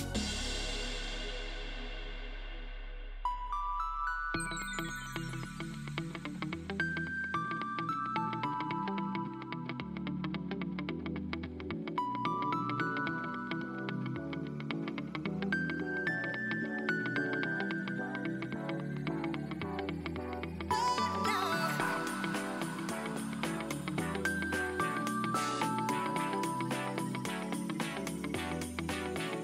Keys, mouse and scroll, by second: 0.2 shift+click, 4.3-5.2 shift+middle drag, 5.2 shift+click, 5.8 shift+click, 8.8-10.3 middle drag, 10.3 e, 13.4-14.1 middle drag, 14.1 Tab, 14.4 click, 14.6-14.9 middle drag, 14.9-15.9 scroll down 3, 15.9-17.1 drag, 17.6 click, 18.0 scroll up 1, 18.3-18.7 middle drag, 18.7 Tab, 19.7 ctrl+r, 21.3 ctrl+r, 22.8 Tab, 23.2-24.3 middle drag, 24.3 Tab, 24.8 ctrl+r, 26.5 scroll down 3, 26.8-28.4 shift+middle drag, 28.4 scroll down 1, 28.5 Tab, 29.0-29.4 middle drag.